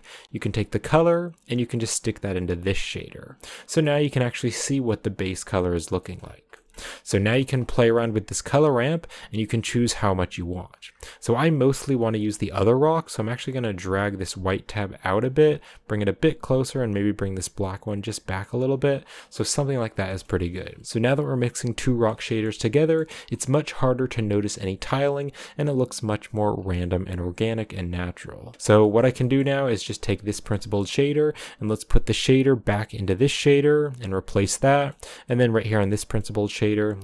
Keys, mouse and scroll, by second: 0.6 click, 3.8-5.2 middle drag, 5.2 scroll up 2, 5.5 middle click, 6.3-8.2 scroll up 2, 8.2-10.9 drag, 10.9 scroll down 2, 11.0 middle click, 11.2 scroll up 2, 13.9-18.5 drag, 18.5-19.1 scroll down 4, 19.1-23.1 middle drag, 23.1 scroll down 2, 23.4-24.9 middle drag, 24.9-25.2 scroll up 3, 26.5 scroll down 2, 26.7-30.3 middle drag, 30.3-33.8 drag, 34.5-35.6 middle drag, 35.6 click, 36.3 middle click, 36.8 click.